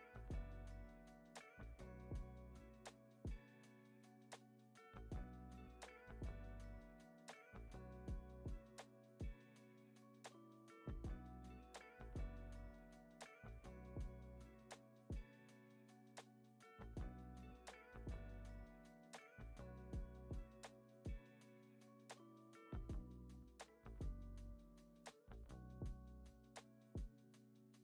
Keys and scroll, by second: 0.8 x, 5.7 z, 7.6 u, 17.1 super+s.